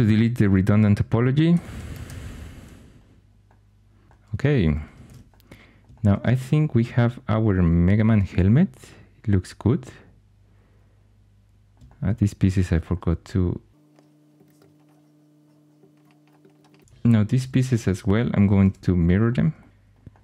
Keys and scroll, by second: 1.2-2.5 typing, 5.0 shift+super+e, 14.6 4, 18.6 alt+x.